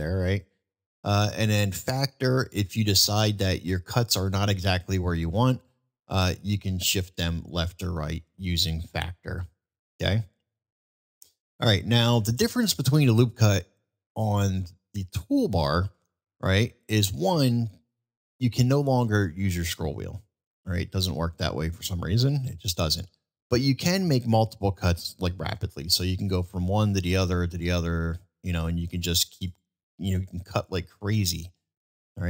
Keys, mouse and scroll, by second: 5.7-8.5 drag, 9.7 ctrl+z, 11.1-11.5 middle drag, 12.1 middle drag, 16.1 click, 26.1 click, 26.7 click, 27.1 click, 27.6 click, 28.4 click, 28.9 click, 29.5 click, 30.2 click, 30.7 click, 31.3 click.